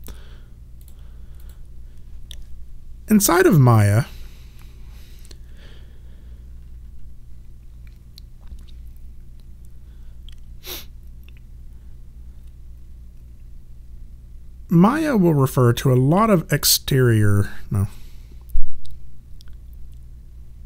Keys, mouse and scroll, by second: 0.8 click.